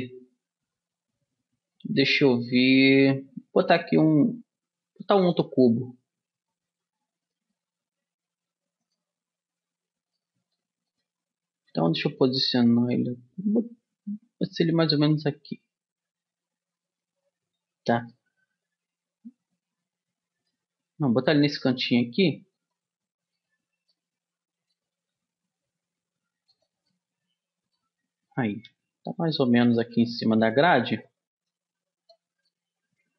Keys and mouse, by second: 8.0 g, 9.8-12.6 middle drag, 12.0 g, 16.3-20.4 middle drag, 21.4 g, 23.8 middle click, 24.4 click, 25.4 g, 29.0 g, 30.4-33.1 drag.